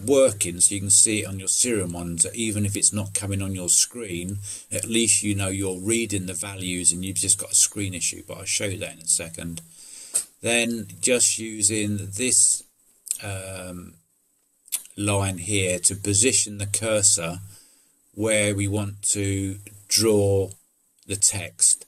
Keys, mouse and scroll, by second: 8.9 click, 10.0 click.